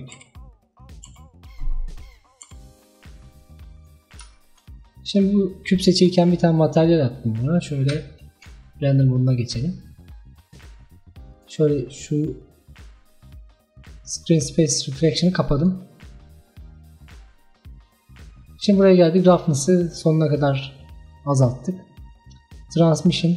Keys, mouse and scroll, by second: 0.2 s, 1.1 s, 2.2-2.5 scroll down 3, 2.5 s, 4.1 scroll down 2, 4.4-6.0 shift+middle drag, 6.0 click, 8.0 z, 9.2-11.4 middle drag, 11.4-14.5 drag, 15.6 click, 16.3-17.6 drag, 17.6-19.2 scroll down 7, 19.2-23.3 drag.